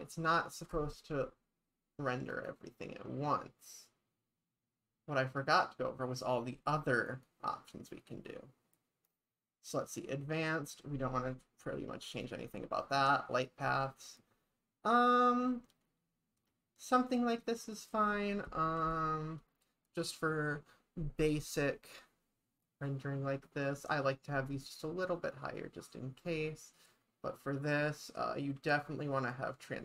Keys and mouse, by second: 2.3 click, 7.1 click, 12.2 click, 12.8 click.